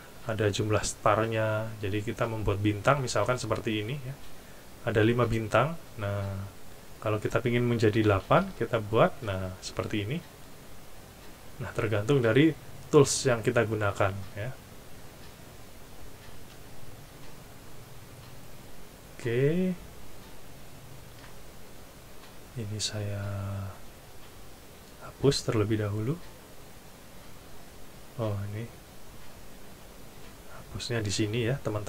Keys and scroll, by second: 8.1 8, 21.1 Delete, 25.5 Delete.